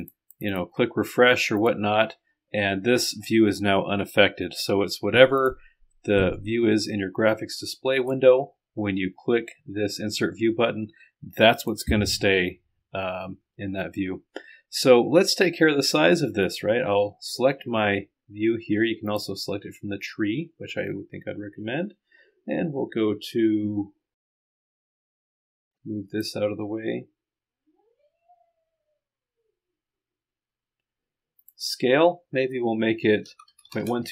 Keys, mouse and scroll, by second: 0.0-1.1 middle drag, 1.6 click, 2.2 middle click, 5.4 click, 6.2 middle click, 6.4 right click, 11.6 click, 12.4-13.5 scroll down 1, 13.5-15.6 scroll up 1, 16.5 click, 19.1 click, 20.4-21.1 scroll down 2, 21.6-22.6 scroll down 2, 25.6-26.7 drag, 31.4 click, 33.6 KP_2.